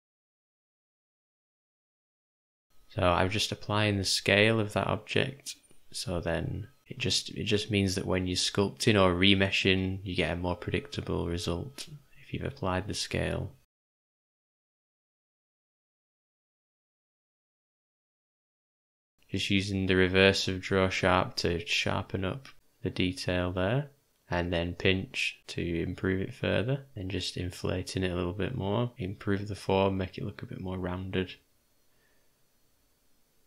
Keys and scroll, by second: 0.5 u, 2.3 d, 3.7 o, 4.2 shift+d, 5.3 v, 6.8 j, 24.1 p.